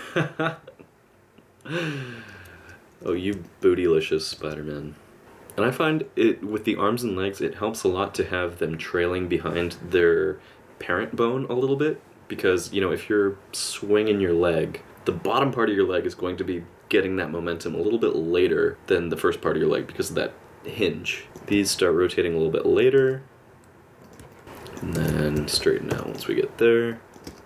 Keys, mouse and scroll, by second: 2.8 click, 2.8 space, 3.4 middle click, 4.0 middle click, 4.4 space, 21.2 click, 21.6 middle click, 23.0 r, 24.3 middle click, 24.4 i, 24.4 space, 25.0 alt+r, 25.9 i, 26.9 click, 27.3 space.